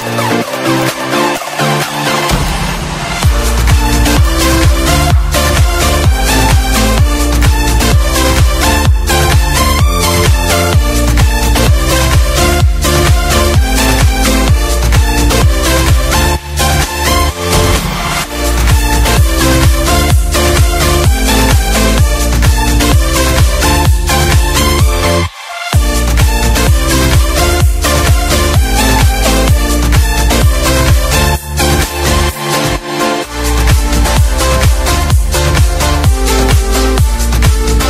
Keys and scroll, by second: 1.9 ctrl+z, 2.8 Left, 4.9 F5, 14.3 ctrl+shift+=, 16.0 space, 16.6 d, 19.2 ctrl+d, 22.3 b, 24.0 F1, 25.8 ctrl+/, 26.7 Delete, 27.1 ctrl+d, 31.6 z, 34.0 ctrl+shift+=, 35.2 Page_Down.